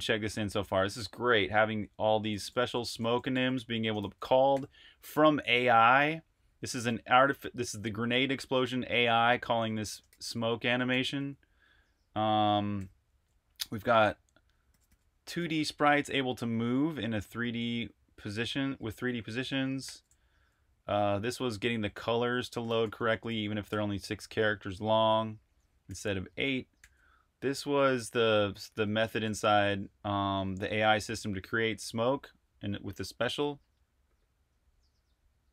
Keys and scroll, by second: 0.0-4.5 typing, 6.6 Escape, 6.9-11.1 typing, 12.4-13.1 typing, 14.5-17.3 typing, 19.4-23.9 typing, 25.7-26.6 typing, 27.8-30.1 typing, 31.7 Escape.